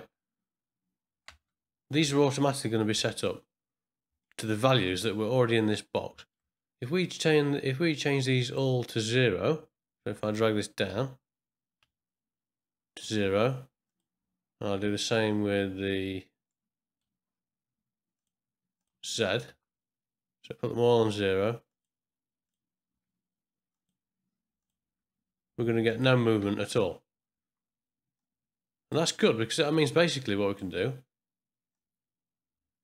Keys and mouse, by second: 1.3 space, 2.9 Home, 4.2 ctrl+click, 6.2 ctrl+middle click, 6.5 middle click, 8.0-8.6 drag, 10.2 click, 10.9 g, 13.8 click, 16.4 middle click, 18.1 click, 18.8 click, 19.5 g, 22.4 click, 22.9 g, 24.6 click, 24.8 g, 26.4 space, 28.1 click, 29.7-30.7 drag, 31.8-32.8 drag.